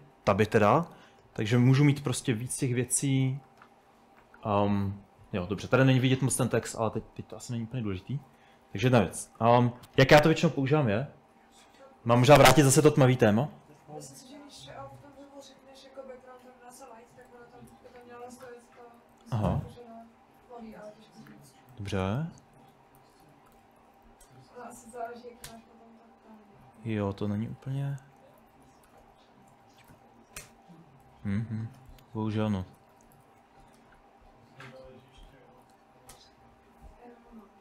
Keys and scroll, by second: 3.3 Escape, 3.4 Escape, 4.9 Escape, 5.4-9.8 typing, 13.2 Escape, 17.2-20.8 typing, 21.3 Escape, 21.5 Escape, 21.8-36.3 typing.